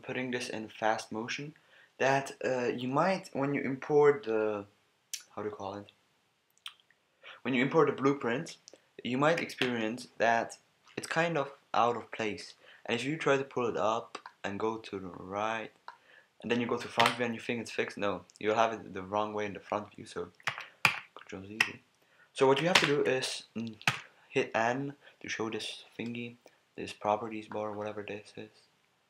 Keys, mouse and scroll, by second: 17.0 KP_1, 20.5 ctrl+z, 20.9 ctrl+z, 22.7 ctrl+KP_1, 23.9 n, 27.1-29.0 drag.